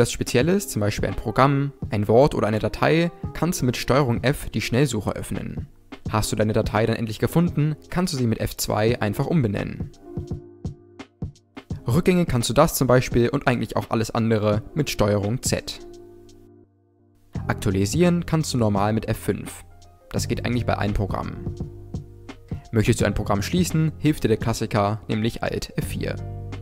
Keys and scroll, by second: 3.2 ctrl+f, 7.7 F2, 14.3 ctrl+z, 17.5 F5, 23.9 alt+F4.